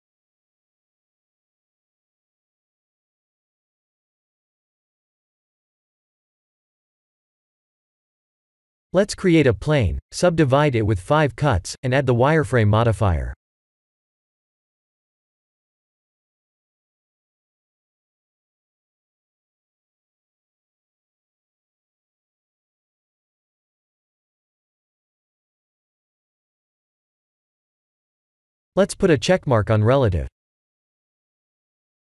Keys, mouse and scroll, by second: 1.0 right click, 4.0 click, 4.4 middle click, 6.7 middle click, 7.3 KP_1, 7.8 KP_7, 8.5 click, 9.3 shift+a, 13.3 Tab, 14.5 right click, 16.2 click, 23.2 Tab, 23.9 click, 24.6 click, 30.0 click, 31.3 click.